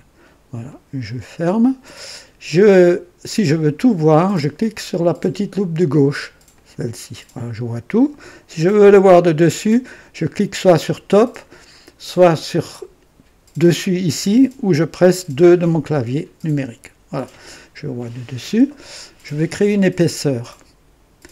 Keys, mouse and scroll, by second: 0.6 click, 6.5 click, 15.2 KP_2, 18.7 scroll up 2.